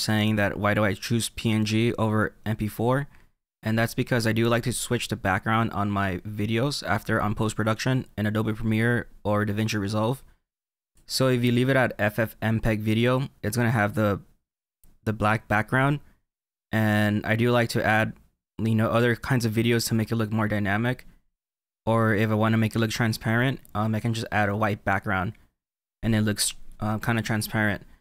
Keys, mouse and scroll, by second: 10.9 click.